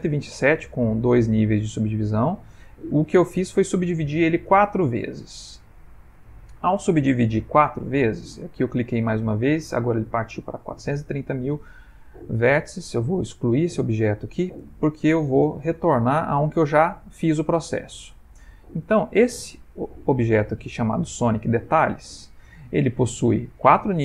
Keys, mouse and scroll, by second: 2.8 click, 13.1 middle click, 13.4 middle click, 13.6 x, 15.8 /, 18.3 click, 20.0 click, 20.6 click, 21.5 middle click.